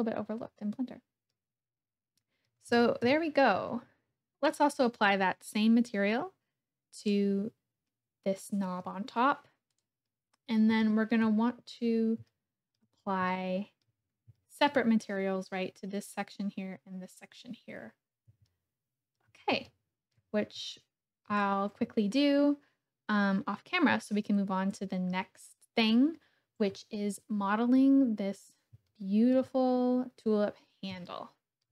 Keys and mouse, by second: 3.1 KP_1, 4.4 click, 6.9 click, 10.8 shift+click, 12.3-12.8 shift+drag, 13.4-13.9 shift+middle drag, 14.4 shift+middle click, 18.5 shift+middle click, 19.6-20.2 shift+drag, 20.7-21.3 shift+drag, 28.9 shift+click, 31.1 shift+middle click.